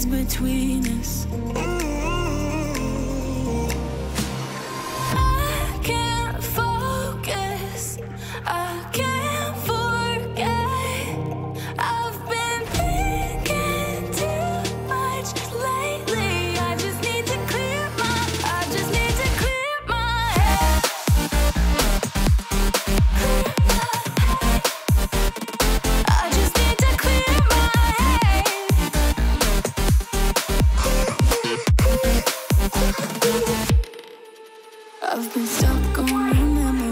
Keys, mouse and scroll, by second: 15.5 Up, 15.7 Down, 16.0 Up, 16.4 Down, 16.7 Return, 23.0 ctrl+t, 25.3 v, 28.7 Return, 29.9-31.6 ctrl+alt+middle drag, 29.9-31.6 scroll up 2, 31.9 ctrl+u.